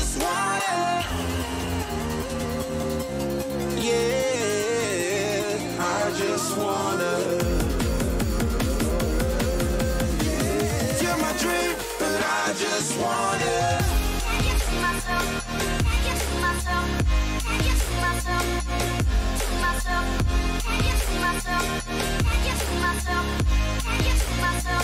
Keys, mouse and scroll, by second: 16.9-18.5 middle drag, 23.0-24.8 middle drag, 24.1 a, 24.4 a.